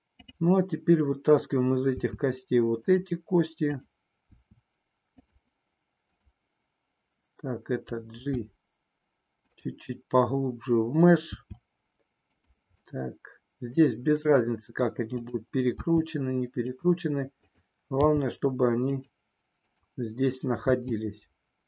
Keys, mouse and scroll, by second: 0.2 click, 2.0 e, 3.0 click, 3.6 click, 4.2 e, 8.1 g, 11.4 e, 12.5 click, 13.2 middle click, 15.1 click, 15.7 e, 16.7 click, 18.0 g, 20.6 e.